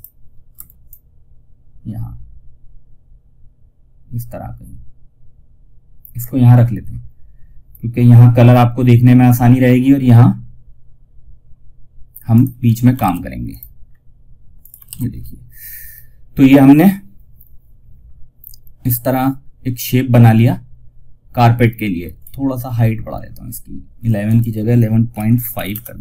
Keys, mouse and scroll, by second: 0.2-11.6 drag, 3.8 typing, 5.5 typing, 12.3 F2, 12.8 click, 13.1 scroll down 1, 13.9 click, 14.1 shift+F2, 21.3 shift+F2, 21.5 alt+scroll up 1, 22.0-22.6 alt+scroll down 1, 23.5 click, 25.9 ctrl+z.